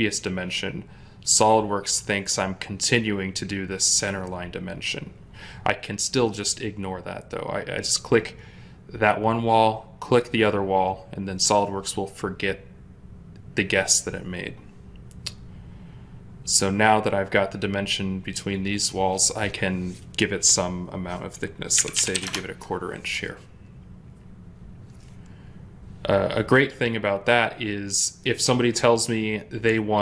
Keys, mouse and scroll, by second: 21.6-22.1 typing, 22.1 Return.